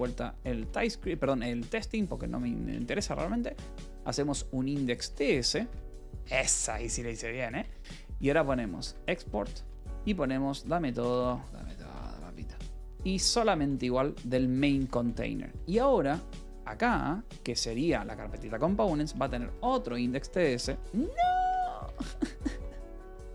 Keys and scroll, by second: 0.0-4.5 typing, 4.9 Escape, 5.3 Return, 5.6 y, 7.4 Return, 7.5-13.5 typing, 14.2 Return, 14.4 Escape, 15.0 :, 16.1 a, 16.8 Escape, 17.6-20.4 typing, 18.2 Return, 21.5 t, 21.8 Escape, 21.9 Return, 22.4 y.